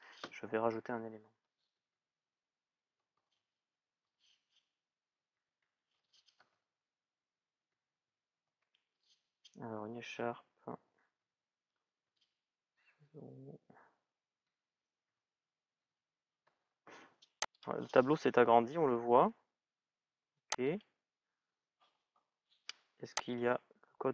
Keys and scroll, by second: 1.5 shift+à, 2.8 shift+", 5.2 Tab, 5.7 shift+e, 8.2 Tab, 10.9 shift+-, 11.9 Tab, 14.0 shift+à, 15.6 shift+', 16.2 Return.